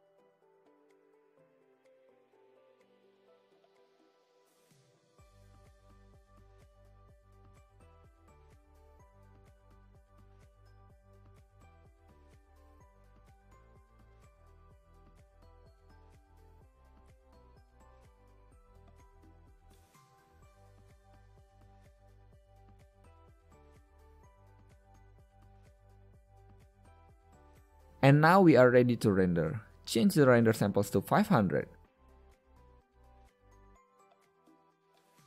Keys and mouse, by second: 10.2 a, 11.6 click, 12.5 KP_0, 27.8 KP_0.